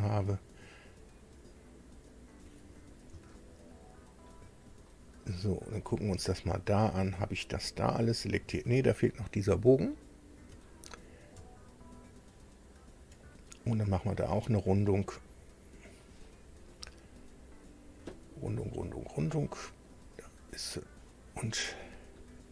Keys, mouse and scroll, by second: 0.1 ctrl+click, 2.1 ctrl+click, 3.3-4.4 shift+middle drag, 4.8-5.9 shift+middle drag, 6.1-6.9 shift+scroll down 2, 7.1-8.5 middle drag, 10.7-11.2 ctrl+scroll up 3, 12.8 ctrl+click, 13.3 ctrl+scroll up 2, 13.5-14.1 scroll down 4, 14.3-16.1 middle drag, 19.8 click, 21.6 middle click.